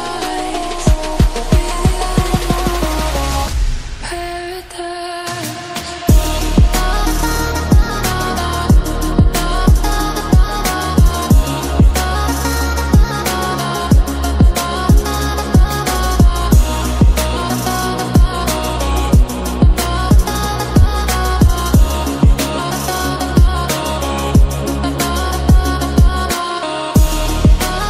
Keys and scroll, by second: 6.6 ctrl+t, 11.8 space, 14.3 ctrl+z, 14.9 Delete, 16.3 d, 17.2 ctrl+z, 17.8 ctrl+z, 17.9 ctrl+z, 19.0 ctrl+z, 19.4 ctrl+-, 21.8 ctrl+e, 22.5 ctrl+j, 23.1 ctrl+t.